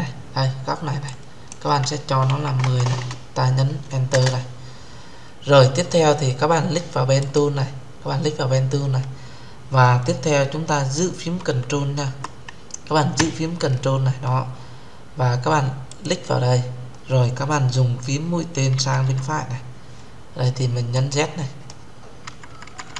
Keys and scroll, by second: 3.8 Return.